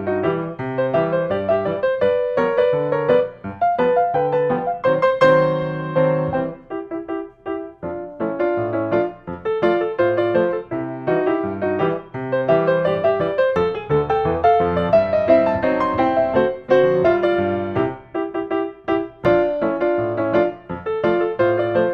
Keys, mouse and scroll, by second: 0.9-1.9 scroll, 8.8 click, 9.8 drag, 10.1-11.4 middle drag, 10.1 scroll, 11.9-13.1 middle drag, 11.9-12.6 scroll, 13.4-14.1 scroll, 13.7-14.9 middle drag, 14.9 scroll up 4, 15.6 click, 16.3 middle click, 16.3 scroll, 18.5 middle click, 18.5-19.2 scroll, 19.0-20.5 middle drag, 20.4 scroll up 1, 20.7 click, 21.1-21.9 middle drag, 21.1-21.9 scroll up 6.